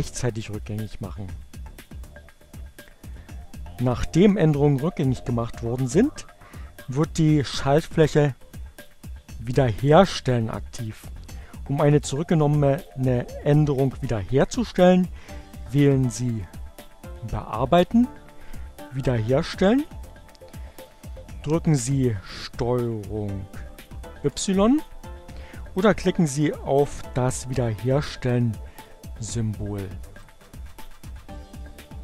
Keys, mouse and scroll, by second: 2.8 click, 16.8 click, 18.3 click, 23.0 ctrl+y, 29.2 click.